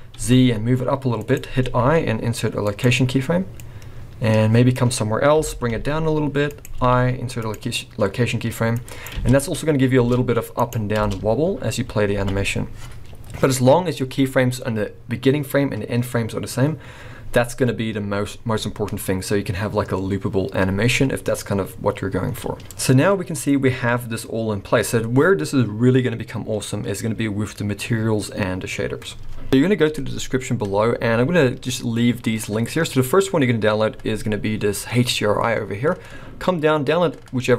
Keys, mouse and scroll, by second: 1.6 i, 3.6 click, 5.4 g, 6.8 i, 8.8 click, 9.2 space, 9.9 space, 10.0 s, 11.0 space, 11.8 scroll up 3, 12.2 alt+a, 12.7 scroll down 2, 17.3 scroll down 2, 22.6 scroll down 1.